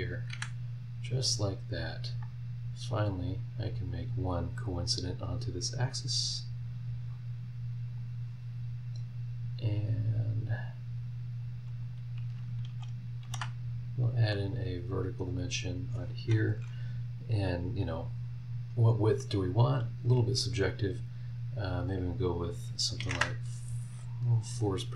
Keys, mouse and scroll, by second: 0.3 Escape, 1.2 click, 2.9 click, 3.6 click, 4.7 click, 7.9 click, 9.7-11.6 drag, 11.8 click, 12.3-14.3 shift+middle drag, 13.2 shift+v, 14.3 click, 14.6 middle click, 15.3 click, 15.6-16.9 middle drag, 23.0 KP_4, 23.1 KP_Enter.